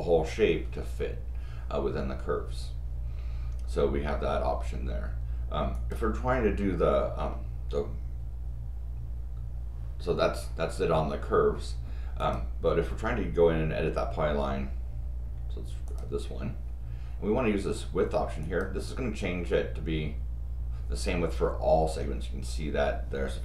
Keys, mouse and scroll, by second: 5.7 click, 12.2 click, 15.9 click, 18.4 click.